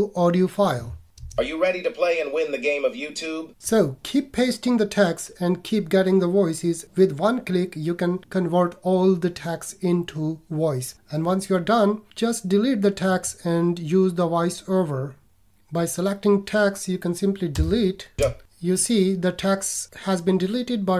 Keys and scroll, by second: 17.5 BackSpace.